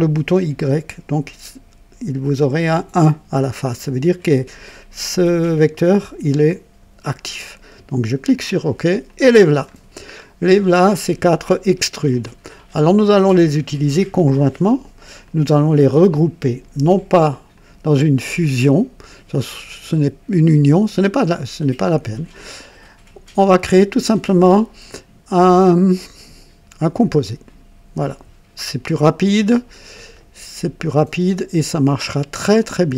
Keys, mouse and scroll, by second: 7.9 click, 9.0-9.8 drag, 9.9 scroll down 1, 10.6 click, 12.1-13.6 drag, 15.2 click, 17.5 shift+click, 27.4 click, 30.1-32.4 drag, 31.8 right click, 32.6 click.